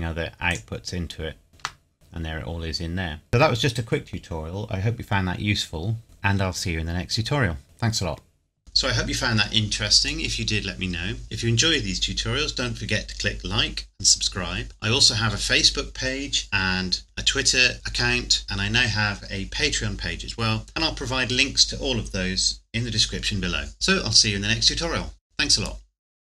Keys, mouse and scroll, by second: 1.9 scroll down 1.